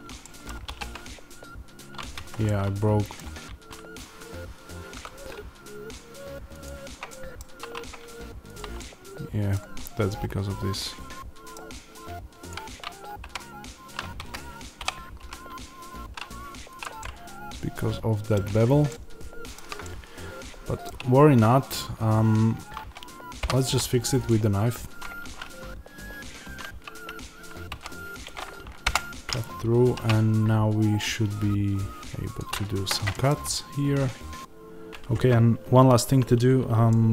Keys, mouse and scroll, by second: 4.9 z, 6.4 click, 7.0-8.4 middle drag, 8.4 click, 8.7-12.4 middle drag, 12.4 click, 13.1 g, 14.2 Escape, 14.7 o, 16.7 click, 16.9-18.7 middle drag, 20.2-23.3 middle drag, 21.6-23.3 scroll, 23.3 k, 28.8 Return, 29.8 ctrl+r, 32.8 Escape, 33.1 middle click, 33.3 Tab, 34.9 middle click.